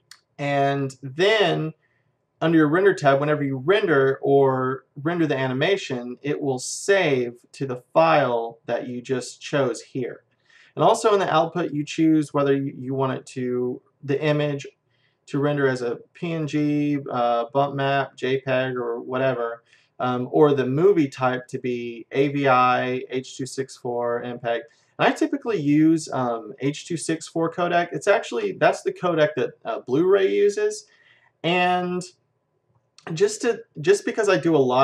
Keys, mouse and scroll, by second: 6.8-8.6 drag, 11.6-13.5 drag.